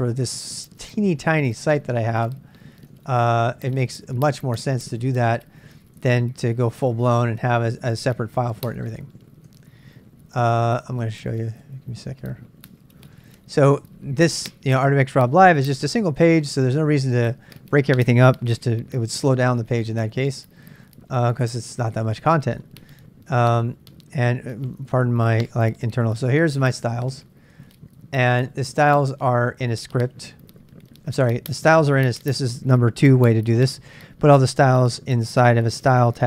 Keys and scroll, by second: 0.0-6.7 typing, 7.4 Return, 8.5-15.2 typing, 12.1 Return, 16.5-17.1 BackSpace, 19.0-32.4 typing, 20.3 Return, 34.0-36.2 typing.